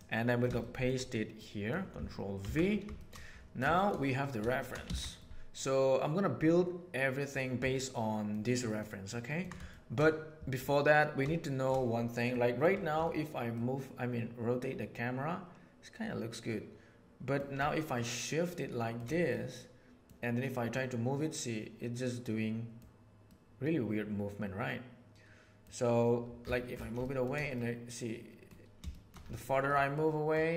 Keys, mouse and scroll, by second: 0.5-0.9 shift+middle drag, 1.3-1.7 middle drag, 2.5 ctrl+v, 2.9 shift+middle click, 3.7 shift+middle click, 4.0 middle drag, 4.4 shift+middle drag, 4.8 alt+a, 5.2-7.3 middle drag, 7.7-8.3 ctrl+middle drag, 8.5 ctrl+middle drag, 9.1 ctrl+middle click, 9.7 shift+middle drag, 11.4 shift+middle drag, 12.3 middle click, 13.5-17.3 middle drag, 17.9-18.9 shift+middle drag, 19.3-20.0 middle drag, 20.7-22.7 middle drag, 23.2-25.6 middle drag, 27.0 shift+middle drag, 27.5-28.5 middle drag, 28.9 shift+middle drag, 29.9-30.2 middle drag.